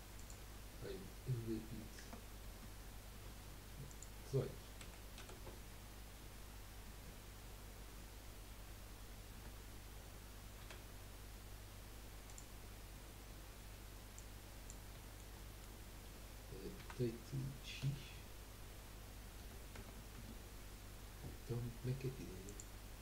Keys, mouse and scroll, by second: 0.1-3.3 drag, 3.9-7.0 drag, 8.4-13.8 drag, 9.3 Tab, 9.3-13.8 middle drag, 9.3-13.8 right drag, 10.6 s, 14.1 click, 15.0-16.9 shift+middle drag, 16.9 r, 20.9 scroll up 2.